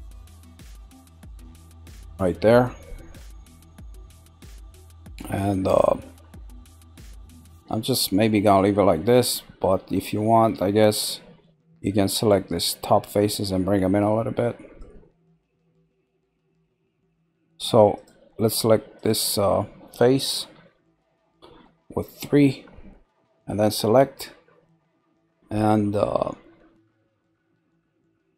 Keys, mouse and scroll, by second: 2.5-3.8 middle drag, 4.3-9.3 middle drag, 9.9-12.9 shift+middle drag, 14.2-15.7 middle drag, 15.7 scroll, 16.4 shift+middle click, 18.0 click, 18.9 click, 20.4 3, 20.9 click, 21.6-24.6 middle drag.